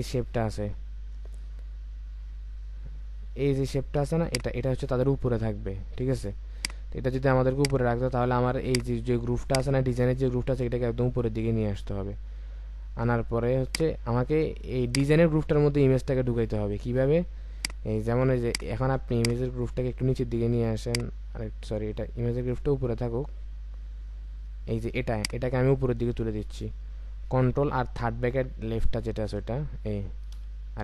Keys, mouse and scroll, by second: 0.0-0.8 ctrl+scroll down 1, 0.8-1.9 alt+scroll down 1, 4.2 ctrl+click, 25.1 ctrl+click, 28.9 ctrl+].